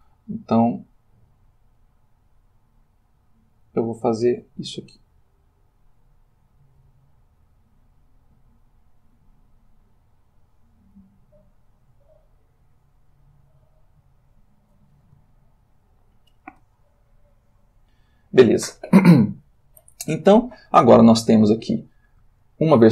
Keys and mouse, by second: 1.1 click, 3.1 click, 4.7-6.2 drag, 6.8 click, 8.2-9.4 drag, 9.7 click, 11.8-13.2 drag, 13.7-14.8 drag, 15.3-16.7 ctrl+middle drag, 17.3-18.4 shift+drag, 22.4-22.9 shift+middle drag.